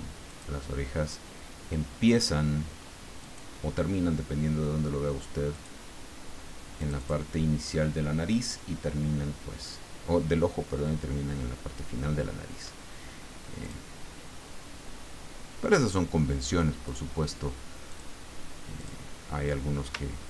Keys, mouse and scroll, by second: 0.3 click, 3.2 click, 5.5 click, 6.8 click, 13.6 click, 15.6 click, 16.8 click, 17.9 click, 18.8 click, 20.1-20.2 ctrl+scroll up 2.